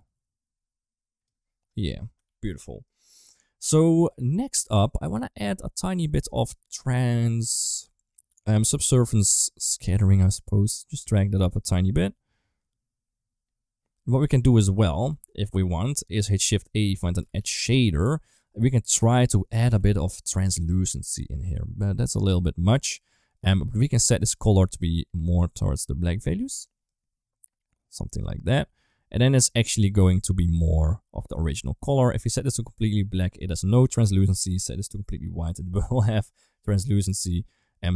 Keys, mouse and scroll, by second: 1.8 right click, 2.5 ctrl+s, 2.5 middle click, 3.8 middle drag, 5.0 middle click, 6.1 middle click, 6.5 middle click, 9.7 click, 10.4-14.0 drag, 14.6 middle click, 15.0 ctrl+s, 15.3 click, 15.8 click, 16.3 shift+a, 17.0 d, 18.8-21.2 drag, 21.4 middle click.